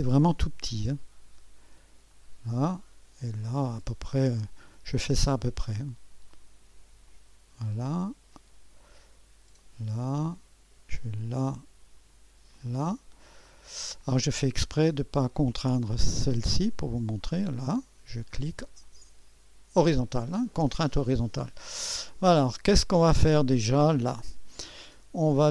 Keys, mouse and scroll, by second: 2.1 click, 4.7 click, 7.1 click, 7.8 click, 9.6 click, 11.2-12.2 drag, 12.5 click, 13.5 middle click, 14.4 right click, 14.4-15.1 scroll up 1, 14.5 click, 14.5-15.6 middle drag, 15.6 right click, 15.9 click, 15.9 middle click, 16.7 right click, 16.8 click, 17.2 click, 18.2 click, 18.8-21.7 drag, 21.7-22.8 scroll down 1, 22.2-25.5 drag.